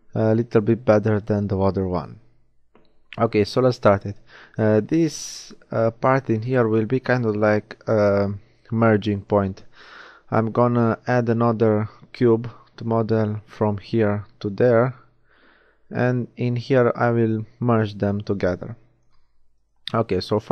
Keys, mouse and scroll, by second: 1.3 middle click, 8.9-11.9 shift+middle drag, 20.3 shift+z.